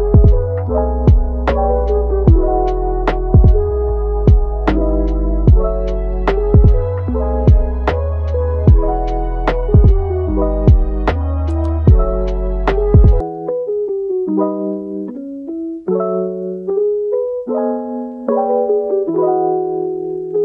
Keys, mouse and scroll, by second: 0.0 Tab, 0.2 click, 1.3 g, 2.2 Tab, 2.7 click, 3.1 Tab, 3.4 click, 3.7 g, 4.5 Tab, 4.7 click, 5.3 click, 5.6 g, 7.4 alt+s, 8.8 g, 10.0-11.3 middle drag, 11.3 Tab, 11.5-12.5 middle drag, 12.5 click, 13.5 g, 15.0 alt+s, 15.9 g, 16.8 e, 18.1-18.8 middle drag, 18.8 g, 19.7-20.0 middle drag, 20.0 Tab.